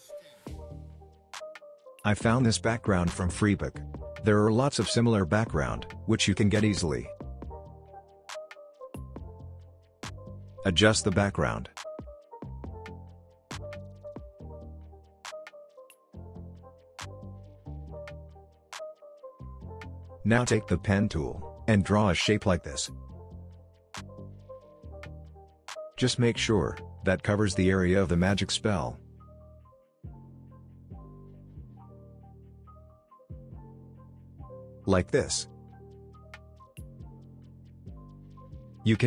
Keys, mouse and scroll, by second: 10.3 click, 11.8 s, 12.7 click, 14.0 Return, 15.3 click, 18.9-19.3 alt+scroll up 1, 21.6 click, 21.6 click, 22.2-22.9 alt+scroll up 1, 22.9 alt+scroll down 1, 23.3 alt+scroll up 1, 24.4-26.3 drag, 26.6 click, 27.2 alt+scroll down 1, 27.2 alt+scroll up 1, 27.3 click, 27.5 ctrl+z, 27.5 alt+scroll down 1, 27.6-28.1 click, 28.4 alt+scroll up 1, 28.6 click, 28.7 ctrl+z, 28.9-29.4 click, 29.5 alt+scroll down 1, 29.7-30.3 click, 30.3 alt+scroll down 1, 30.4 alt+scroll up 1, 30.5-30.9 click, 30.9 ctrl+z, 31.2-31.6 click, 31.8 alt+scroll up 1, 32.0 alt+click, 32.2 alt+scroll down 1, 32.5 click, 33.4 v, 33.5 alt+scroll down 1, 33.6 alt+scroll up 1, 33.6 click, 33.8 ctrl+z, 33.9 click, 36.9-37.5 alt+scroll down 1, 37.5 space, 37.5-38.2 click, 38.0 space, 38.2 click.